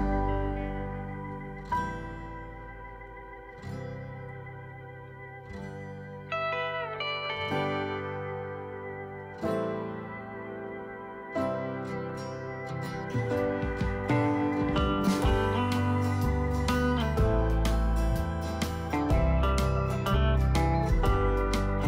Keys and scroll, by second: 16.3 ctrl+d.